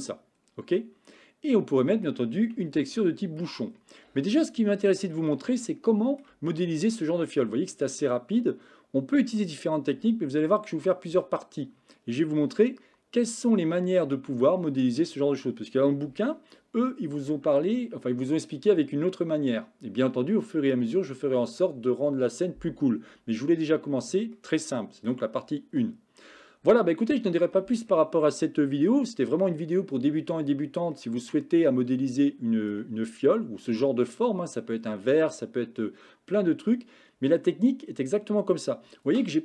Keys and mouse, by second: 1.3-2.2 middle drag, 2.7-3.5 shift+middle drag, 4.3-5.0 shift+middle drag, 5.2-6.3 middle drag, 6.6 shift+middle click, 24.5-25.2 middle drag, 31.1-32.8 middle drag.